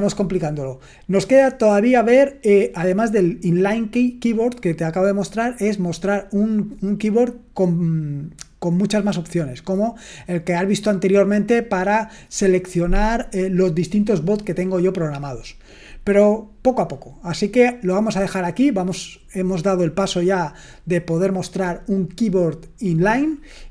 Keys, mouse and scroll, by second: 9.0-10.0 drag, 11.2 click.